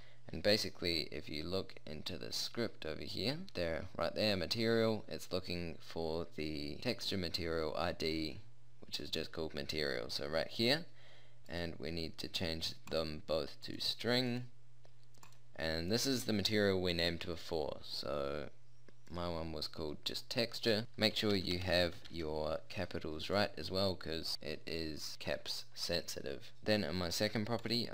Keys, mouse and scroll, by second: 3.5-9.4 drag.